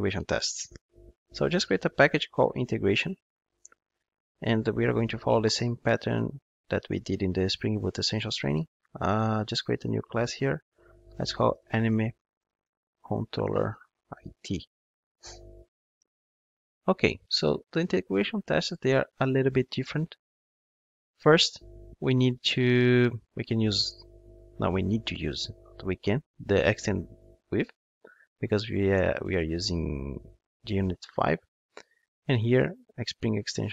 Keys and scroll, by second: 9.9 super+n, 25.2 Return, 33.4 Return.